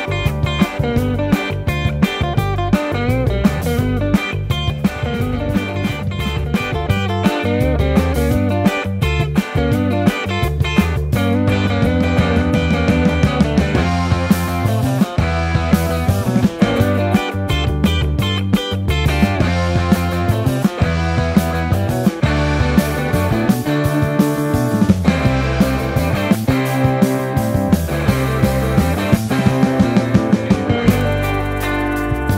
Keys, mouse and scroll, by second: 0.7 Tab, 0.7 Delete, 0.9 shift+a, 3.4 Tab, 4.0 shift+click, 4.1 Tab, 4.3 ctrl+z, 4.6 Tab, 5.0 alt+z, 5.4 KP_1, 5.4 1, 6.2 r, 7.3 alt+z, 7.3 s, 7.5 Tab, 7.6 ctrl+2, 8.0 Tab, 8.8 Tab, 9.2 Tab, 16.0 r, 16.0 z, 16.5 a, 16.8 Tab, 17.2 Tab, 17.7 s, 18.6 Tab, 18.8 Tab, 18.9 Tab, 19.1 KP_1, 20.5 KP_1, 20.8-21.1 middle drag, 22.0 s, 23.4 Tab, 23.8 alt+z, 24.2 r, 24.4 z, 24.6 Tab, 25.4 Tab, 26.0 alt+z, 26.7 ctrl+z, 26.9 o, 27.8 alt+z, 28.4 r, 29.1 Tab, 30.0 r, 31.1 KP_1, 31.7-32.2 ctrl+z.